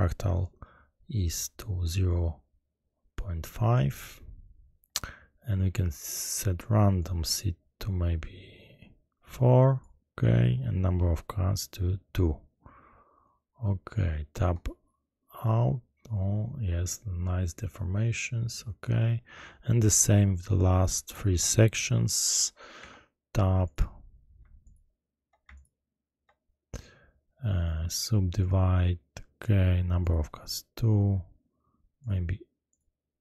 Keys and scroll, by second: 22.7 Tab.